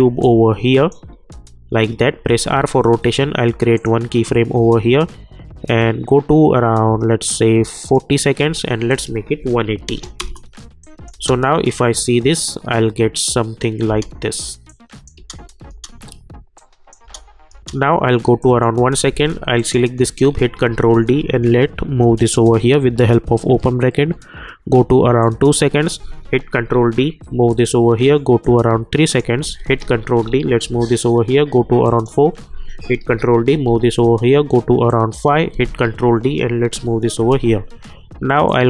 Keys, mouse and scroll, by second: 0.2-2.1 drag, 2.1 r, 3.7 click, 7.8 click, 10.2 Return, 10.8 click, 11.1 space, 13.8 space, 14.7 click, 15.1 space, 16.5 click, 17.0 space, 18.4 click, 20.5 ctrl+d, 21.9 [, 25.2 click, 26.5 ctrl+d, 27.3 [, 28.4-29.8 drag, 29.8 ctrl+d, 30.6 [, 31.8 click, 33.0 ctrl+d, 33.6 [, 34.9 click, 35.8 ctrl+d, 36.7 [, 38.4-38.6 drag.